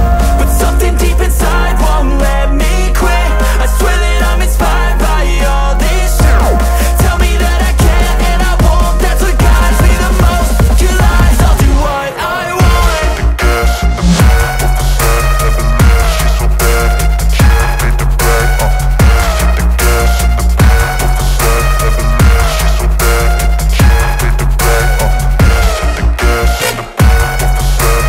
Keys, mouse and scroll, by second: 0.0 ctrl+click, 0.2-1.5 ctrl+space, 3.6 click, 3.7-5.9 drag, 6.4-7.1 alt+right click, 10.8 alt+click, 12.1-13.7 drag, 13.8 space, 14.2 click, 18.5 space, 18.6 click, 19.4-22.2 alt+drag, 21.8 space, 21.9 click, 22.8 alt+click, 23.9 space, 24.0 click, 24.7-25.9 alt+drag.